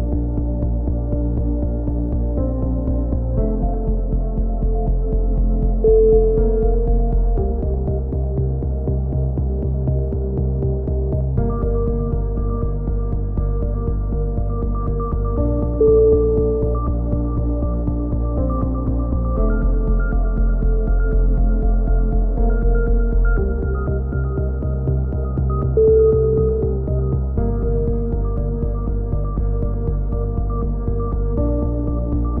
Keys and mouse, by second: 1.0-1.4 drag, 1.4-2.0 middle drag, 2.0 a, 3.0 middle drag, 3.3 KP_3, 3.6 z, 4.4 click, 6.0 a, 7.0-7.4 middle drag, 7.9-8.3 drag, 8.2 a, 8.3 z, 8.4-8.9 drag, 10.7-11.2 drag, 14.2-14.7 middle drag, 15.4 KP_1, 15.6 z, 17.0-17.6 drag, 20.4-21.4 drag, 21.4 z, 21.7-22.4 right drag, 21.7 z, 22.0 click, 23.7-27.2 drag, 23.7-24.7 right drag, 26.0 right click, 27.2 z, 27.5 a, 27.7-28.2 drag, 28.3 middle click, 28.8 middle click, 31.7-32.4 typing.